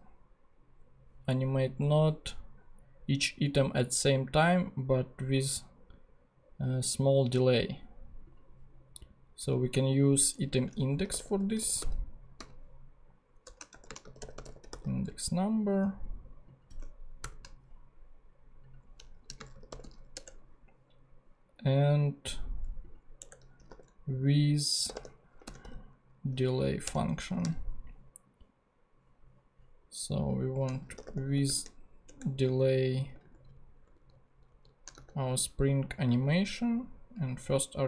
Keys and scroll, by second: 10.3 Return, 10.8-12.4 typing, 13.4-15.4 typing, 17.2 shift+/, 19.0-20.3 typing, 23.2 Return, 23.4-27.4 typing, 26.6 Down, 26.8 Return, 30.5-31.9 typing, 32.0 shift+Return, 32.7 Return, 32.9 Right, 33.5 shift+super+Left, 34.8 shift+super+Left, 34.9 shift+super+x, 36.0 Left.